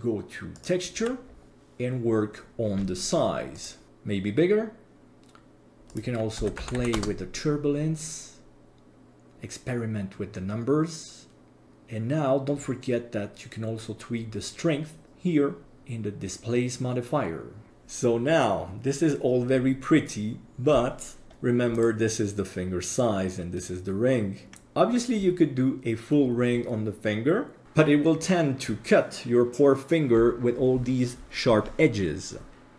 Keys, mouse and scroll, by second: 0.6 click, 1.2-3.6 scroll down 8, 3.6-4.8 drag, 5.9-9.3 drag, 11.6 click, 12.5-13.3 scroll down 3, 13.3-15.0 scroll down 1, 15.0-17.7 drag, 20.0-20.7 middle drag, 21.3 KP_1, 21.7 right click, 23.6 right click.